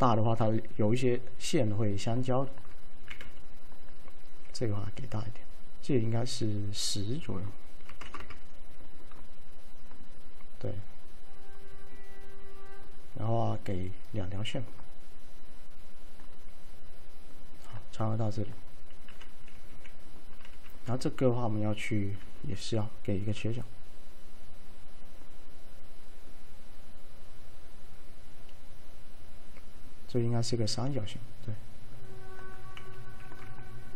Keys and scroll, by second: 3.2 f, 7.7-8.6 typing, 19.8-20.6 typing, 22.3 alt+e, 32.8 F3.